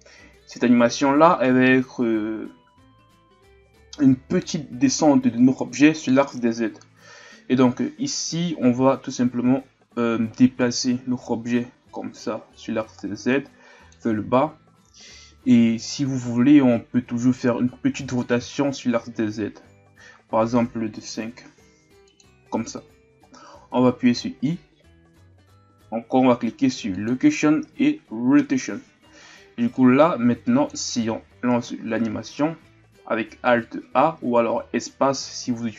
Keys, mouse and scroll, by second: 8.9-10.6 scroll up 2, 10.6-14.4 drag, 29.7-34.5 drag, 34.5 alt+a.